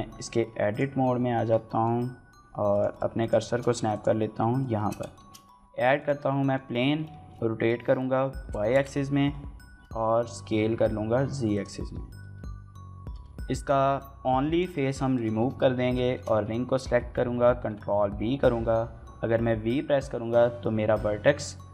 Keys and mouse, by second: 1.2 Tab, 1.5 middle click, 1.9 1, 3.0 shift+click, 3.2 shift+s, 4.1 Tab, 4.6 shift+middle drag, 5.0 shift+a, 6.1 middle click, 6.6 r, 6.9 x, 7.9 y, 8.2 KP_9, 8.3 KP_0, 8.5 KP_Enter, 9.9-13.3 typing, 10.5 click, 11.2 right click, 12.1 shift+click, 12.5 drag, 12.6 click, 12.9 shift+drag, 13.1 shift+click, 13.3 Tab, 14.9 shift+middle click, 15.2 a, 16.0 shift+middle click, 17.4 ctrl+b, 19.4 v.